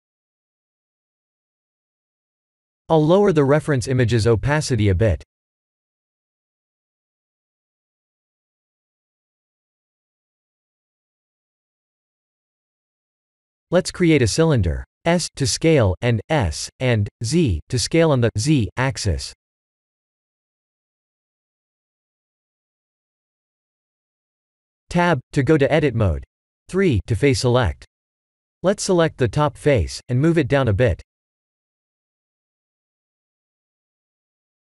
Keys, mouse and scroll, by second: 3.7 click, 5.6 click, 6.1 click, 6.5 click, 13.1 click, 13.6 click, 14.1 scroll down 2, 14.6 shift+middle click, 15.1 shift+a, 17.8 s, 21.2 s, 25.6 Tab, 26.4 middle click, 27.2 3, 28.6 click, 29.7 KP_1, 30.4 g, 33.9 shift+middle click, 34.6-34.7 scroll up 8.